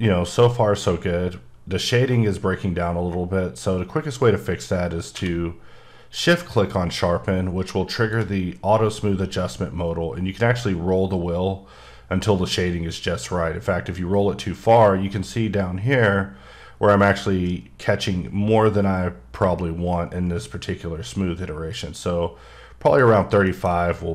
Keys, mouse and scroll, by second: 0.7 click, 5.1 q, 7.9 shift+Num_Lock, 7.9 shift+click, 8.8-9.3 scroll down 3, 9.3-10.6 scroll up 8, 10.6-12.0 scroll down 10, 12.0-13.2 scroll up 1, 13.2-13.7 scroll down 6, 13.9 scroll up 4, 15.7 scroll up 6, 15.8 scroll, 16.1-16.9 scroll down 5, 16.9-17.4 scroll up 4, 17.4-18.0 scroll down 5, 18.0 scroll, 18.2-18.5 scroll up 4, 18.5-19.2 scroll down 4, 19.2 scroll, 19.4-19.7 scroll up 4, 19.9-20.4 scroll down 4, 20.4-21.4 scroll up 7, 21.4-22.9 scroll down 3, 22.9 click, 23.5 shift+middle click.